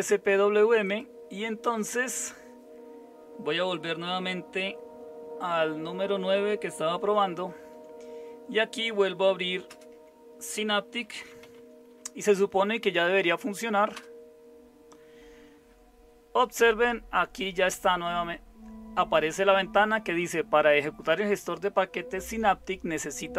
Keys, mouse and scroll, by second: 7.1 super+9, 9.7 super+space, 10.8-12.0 typing, 13.9 Return.